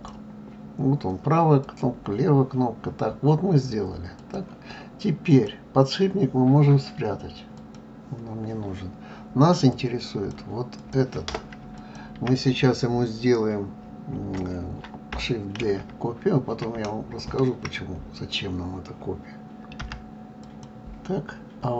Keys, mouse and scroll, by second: 1.6 click, 4.2 click, 5.2 click, 7.5 click, 9.7 click, 10.8 click, 11.8 shift+click, 15.6 shift+d.